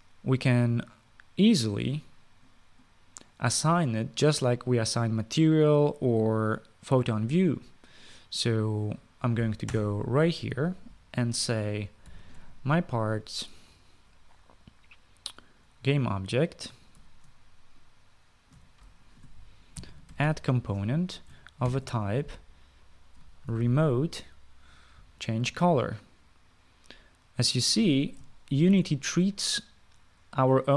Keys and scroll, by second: 10.4 Return, 12.6-13.6 typing, 17.7 ctrl+c, 19.3 ctrl+v, 20.3-22.9 typing, 23.9-24.9 typing, 29.0-29.8 typing.